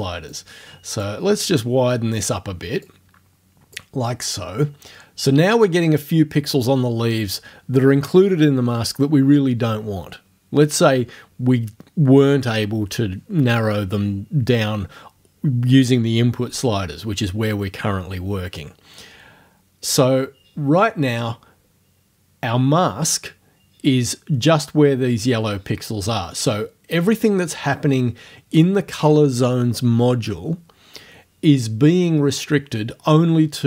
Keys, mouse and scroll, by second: 0.4 click, 2.8-3.9 drag.